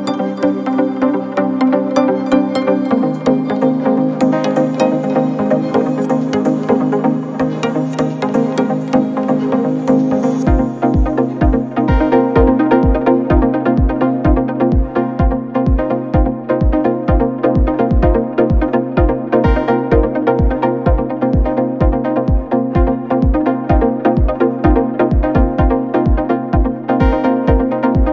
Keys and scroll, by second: 5.5 Left, 9.3-10.0 Up, 9.8 Up, 10.2 Up, 10.4 Up, 10.6 Up, 11.4 Left, 11.7 Left, 11.8 Left, 11.9 Left, 12.2 Left, 12.3 Left, 13.0 Left.